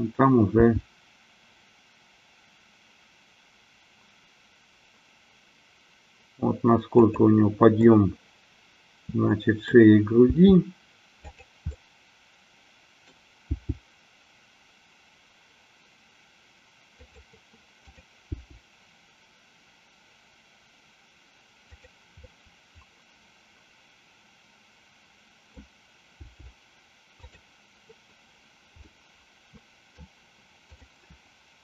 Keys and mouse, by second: 1.0 g, 7.9-9.9 middle drag, 10.4 g, 11.9-13.3 middle drag, 13.6 g, 17.1 click, 17.9-19.1 drag, 19.4 g, 22.3-25.8 middle drag, 26.3 g, 28.9-30.1 middle drag, 30.8 click.